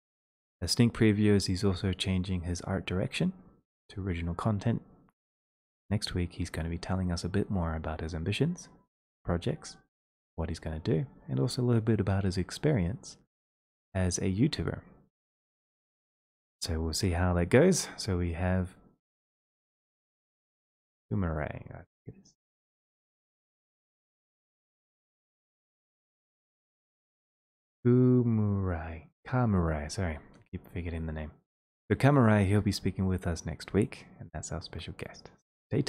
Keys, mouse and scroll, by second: 22.8 click, 26.7 click.